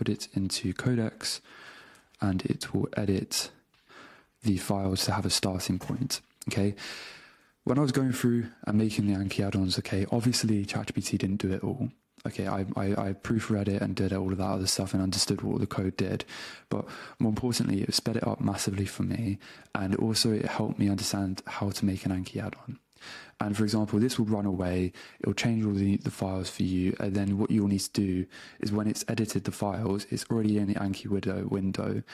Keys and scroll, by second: 2.0 super+v, 27.6 super+Tab.